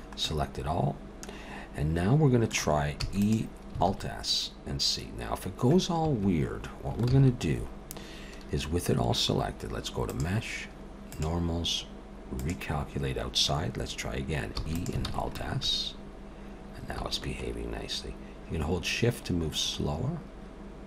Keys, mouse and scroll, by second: 0.2 middle click, 3.0 e, 3.9 alt+s, 7.1 ctrl+z, 10.0 click, 14.5 e, 15.1 alt+s.